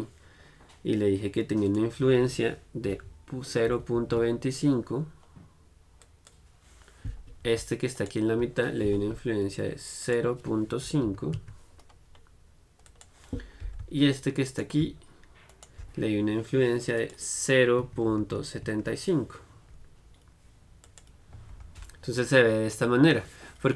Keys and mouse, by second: 6.2-8.2 drag, 8.2-10.2 right drag, 10.2-14.7 drag, 14.7-19.1 middle drag, 21.0 click, 21.7 Tab.